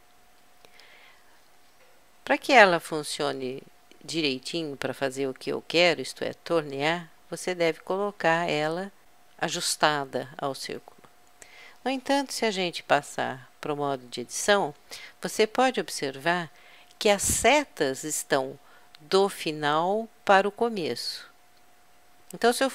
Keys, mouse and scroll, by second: 5.7-7.5 drag, 13.1 Tab.